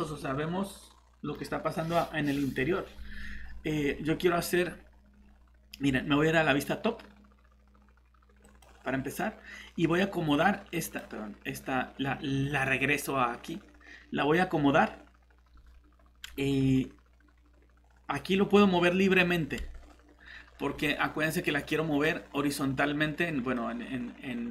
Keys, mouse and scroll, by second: 0.0 middle click, 1.8 scroll up 1, 3.4-3.7 scroll down 1, 3.7-5.1 scroll up 1, 5.1-7.2 scroll down 1, 8.4 click, 18.3-19.7 scroll up 1, 19.7-20.4 scroll down 1, 20.8 middle click, 20.9 scroll up 1, 23.5 middle click.